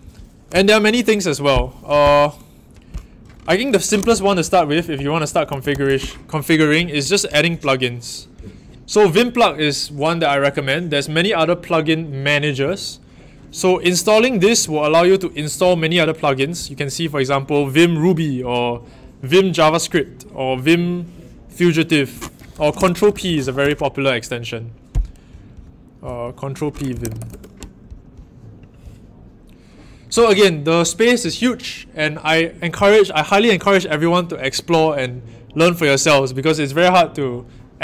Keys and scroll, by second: 0.0 Up, 2.0 Up, 3.7 super+t, 3.7-6.1 typing, 22.4-23.8 typing, 26.8-27.6 typing.